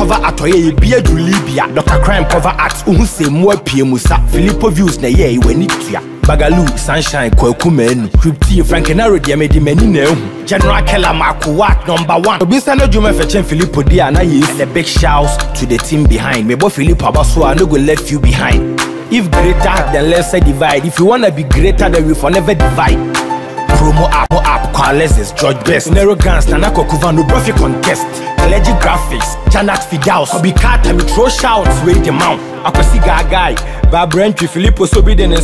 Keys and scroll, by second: 14.9 ctrl+z, 19.6 ctrl+j, 28.9 Up.